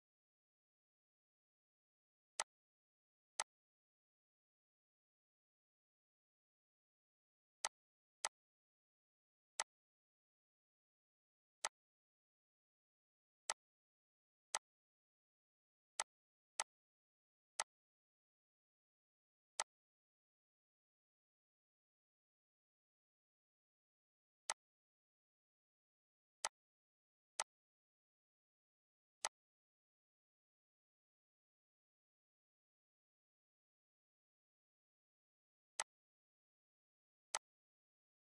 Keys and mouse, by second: 2.1 click, 6.1 click, 7.5 click, 9.8 click, 15.5 click, 16.7 click, 18.0 click, 29.6 click, 31.3 ctrl+g, 32.9 click, 34.2 ctrl+s.